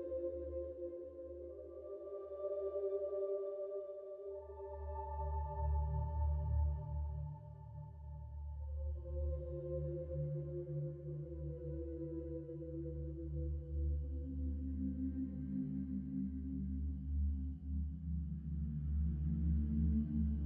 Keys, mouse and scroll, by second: 0.0-3.2 typing, 5.4-7.6 typing, 8.9 shift+9, 10.0 shift+0, 12.8 ctrl+Return, 13.9 Tab, 16.1 x, 16.6 shift+=, 16.8 shift+=, 17.6 1, 19.2 Return, 19.7 Return.